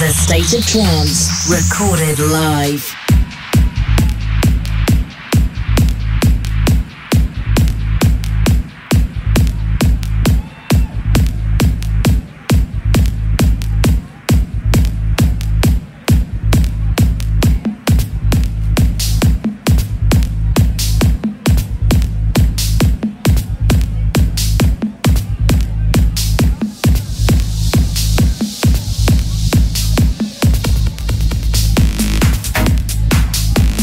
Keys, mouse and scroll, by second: 0.4-23.2 drag, 22.6 BackSpace, 22.7 BackSpace, 25.7 click, 28.2 right click, 29.8-33.8 drag.